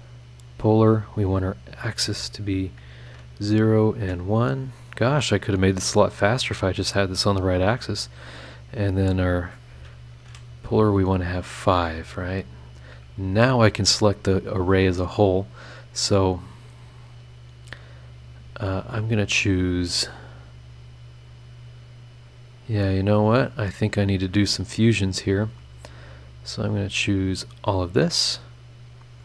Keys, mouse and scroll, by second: 0.4 click, 1.1 click, 1.9 click, 3.0 KP_0, 3.6 click, 4.0 KP_1, 4.5 scroll down 1, 6.2 scroll down 1, 9.1 click, 10.2 KP_5, 11.9 click, 14.5 click, 15.6 click, 17.8 click, 19.1 click, 20.4 click, 21.3 click, 22.7 click, 23.5 click, 24.2 click, 25.9 ctrl+click, 26.4 ctrl+click, 26.8 ctrl+click, 27.3 ctrl+click, 27.6-28.8 ctrl+scroll up 1, 28.8-29.2 scroll up 1.